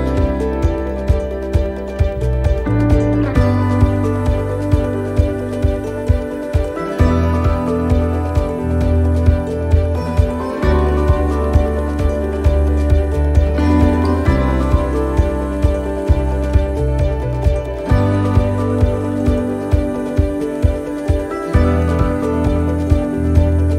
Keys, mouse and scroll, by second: 0.0 click, 1.1 right click, 1.7 scroll down 3, 3.0 scroll down 1, 3.1 x, 4.3 shift+middle click, 5.4 scroll up 1, 6.0 middle click, 6.0 scroll up 3, 6.7 shift+middle click, 7.3 scroll up 1, 7.7 middle click, 8.4 right click, 9.1-9.5 scroll down 2, 10.7 scroll down 1, 11.2 scroll down 1, 12.0 click, 14.6 shift+middle click, 14.9-15.2 scroll up 4, 15.6 shift+middle click, 15.8 shift+scroll down 1, 16.3 scroll down 1, 17.4 click, 19.0 shift+middle click.